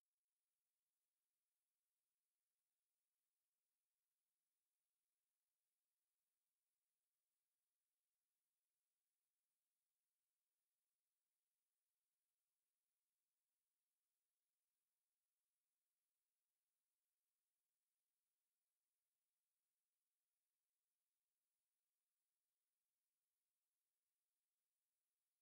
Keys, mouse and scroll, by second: 0.3-0.7 scroll up 2, 0.9 alt+click, 1.3 middle click, 1.9 scroll down 3, 2.1 middle click, 3.9 e, 6.5 f, 7.4 i, 9.0 i, 9.9-11.1 middle drag, 11.2 scroll up 1, 12.2 ctrl+r, 14.8 KP_7, 15.3 Tab, 15.7-16.9 middle drag, 16.3 scroll up 1, 17.7-19.6 drag, 19.9 middle click, 21.1-22.5 drag, 22.9 click, 23.3-23.8 right drag, 23.8 click, 24.1 middle click, 24.7 click, 24.9-25.4 right drag.